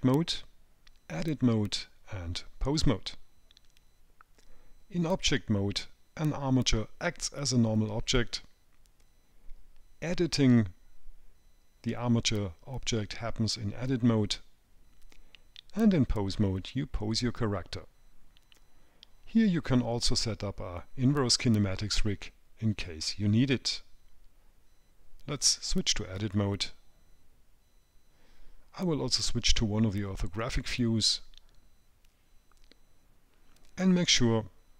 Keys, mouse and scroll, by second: 30.7 click.